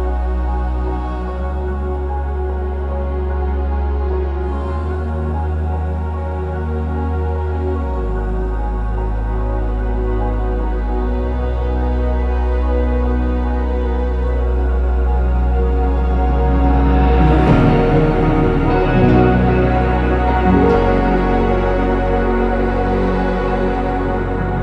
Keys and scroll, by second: 3.8 ctrl+s, 9.1 ctrl+z, 9.3 typing, 12.5 typing, 15.8 ctrl+z, 16.3 typing, 21.8-24.6 typing.